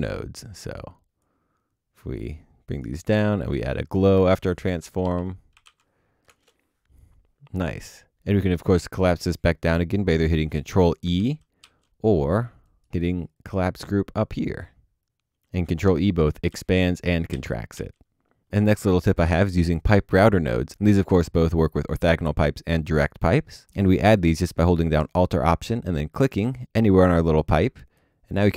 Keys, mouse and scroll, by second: 4.1 ctrl+space, 4.8-6.1 typing, 11.2 ctrl+e, 11.6 ctrl+e, 12.7 right click, 15.3 ctrl+e, 16.0 ctrl+e, 16.7 ctrl+e, 17.7 ctrl+e, 26.1 alt+click, 26.7 ctrl+z, 27.3 alt+click.